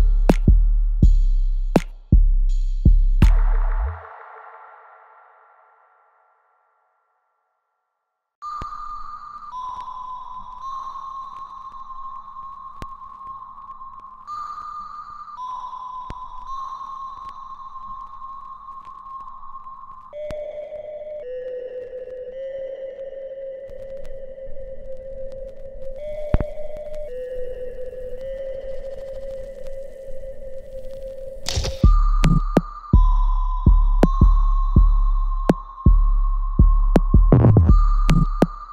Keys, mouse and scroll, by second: 0.0 alt+right click, 1.3 click, 2.5 alt+middle click, 3.2 alt+right click, 4.0 scroll up 1, 4.8-8.2 alt+drag, 9.5 alt+right click, 10.7 click, 12.2-15.2 ctrl+drag, 16.9 alt+click, 17.6 alt+middle click, 18.0-19.4 alt+right drag, 19.4 click, 22.0-24.0 ctrl+drag, 27.7 click, 29.1-36.1 ctrl+drag, 38.3 right click.